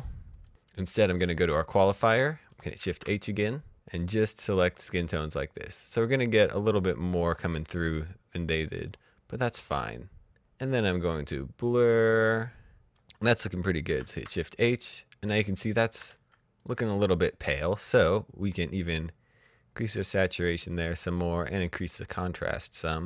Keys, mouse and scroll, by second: 2.1 shift+Num_Lock, 2.3 shift+h, 2.9 click, 10.8 click, 13.1 shift+Num_Lock, 13.8 h, 15.9 v, 16.5 click, 19.3-23.0 drag.